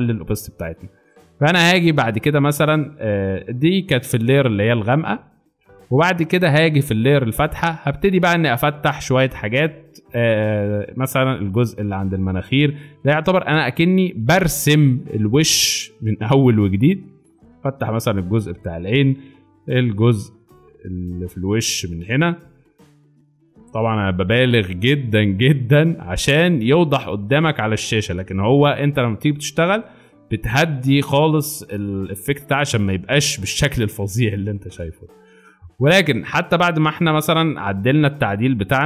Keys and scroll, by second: 1.0-1.9 typing, 8.5 x, 14.2 ctrl+z, 14.6 ctrl+z, 15.0 ctrl+z, 15.5 ctrl+z, 19.7-20.1 typing, 31.3 z, 34.8 space.